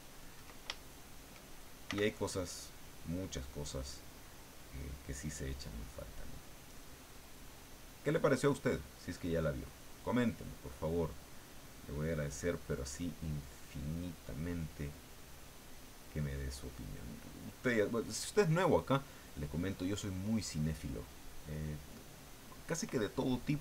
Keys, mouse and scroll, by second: 0.8 ctrl+shift+middle click, 1.9 f, 2.8 click, 3.3-8.8 drag, 11.8-13.0 drag, 13.2 middle click, 14.3-16.6 drag, 16.7 middle click, 19.0-20.7 drag, 21.1 middle click, 23.5 click.